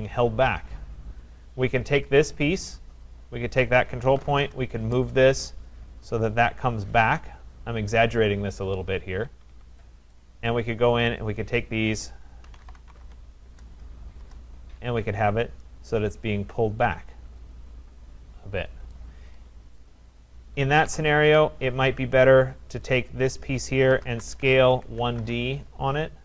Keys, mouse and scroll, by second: 2.1 click, 3.2 click, 3.8-4.7 typing, 5.4 click, 7.2 typing, 7.9 click, 8.8-9.2 scroll, 9.2 Escape, 9.4 Escape, 9.6 Escape, 9.8 middle click, 10.2 right click, 11.6 click, 12.2-14.2 typing, 15.3 middle click, 18.9 right click, 19.9 click, 20.9 Delete, 21.6 middle click, 21.7 middle click, 21.8 middle click, 22.8 click, 23.6-25.5 typing.